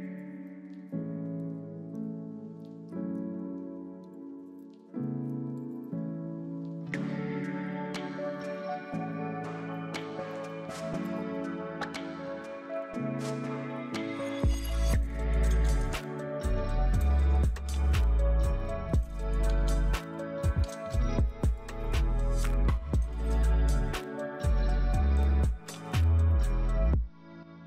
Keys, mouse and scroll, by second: 21.7-23.0 typing, 24.5-25.7 typing.